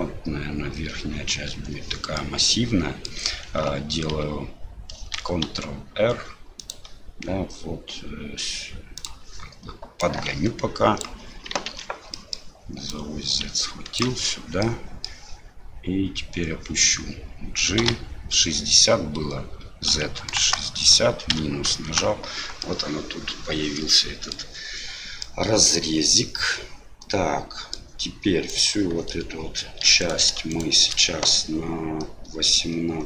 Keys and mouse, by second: 2.2 middle click, 5.2 ctrl+r, 10.0-11.0 drag, 11.7 ctrl+z, 12.1 middle click, 12.9-14.0 drag, 14.8 middle click, 22.7-24.3 middle drag, 25.4-27.8 middle drag, 28.5 right click, 30.0 right click, 30.5 shift+right click.